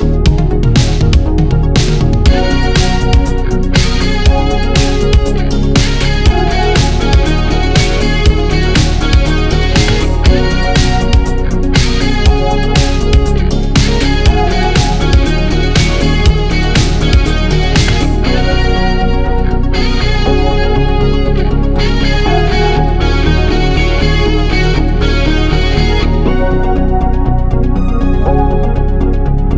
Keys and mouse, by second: 2.3-3.2 middle drag, 3.4-3.9 shift+middle drag, 4.7-5.4 middle drag, 5.7-6.6 shift+middle drag, 7.0-7.9 middle drag, 9.1-9.4 shift+middle drag, 9.7 ctrl+middle click, 11.0 click, 18.3-20.2 drag, 18.3-20.2 middle drag, 18.3-20.2 right drag, 21.1 x, 22.2-22.5 shift+drag, 22.2-22.5 shift+middle drag, 22.2-22.5 shift+right drag, 22.8 click, 23.2-23.5 drag, 23.2-23.5 middle drag, 23.2-23.5 right drag, 23.8-24.5 ctrl+middle drag, 25.1-25.7 shift+middle drag, 26.0-26.5 middle drag, 26.7 shift+middle click.